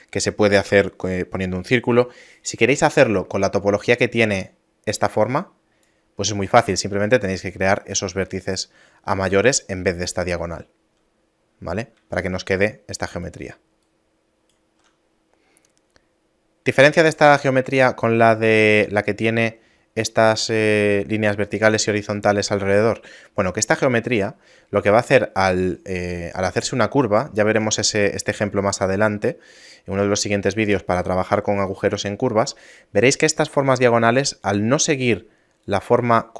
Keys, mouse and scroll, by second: 4.3 d, 4.5 click, 5.9-8.0 d, 8.1 right click, 9.2-10.8 typing, 11.3 middle click, 12.0 d, 12.3 click, 13.3-14.9 typing, 13.9 right click, 15.1 middle click, 18.4 middle click, 35.1-36.3 typing, 35.7 click.